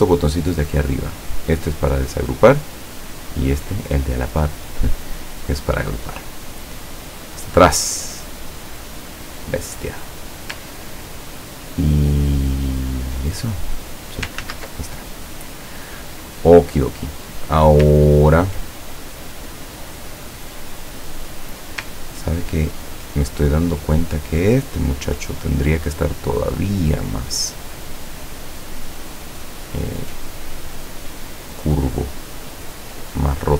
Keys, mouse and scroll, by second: 1.8 click, 5.2 click, 7.5 click, 9.2-9.5 scroll up 1, 10.1 scroll up 1, 11.0 ctrl+scroll down 1, 11.6 ctrl+scroll down 1, 12.7 ctrl+scroll up 1, 13.5 ctrl+click, 14.5 ctrl+z, 18.1 ctrl+scroll down 2, 20.4-21.6 drag, 22.3 ctrl+scroll down 2, 23.8 click, 26.2-29.6 drag, 30.0-33.5 drag.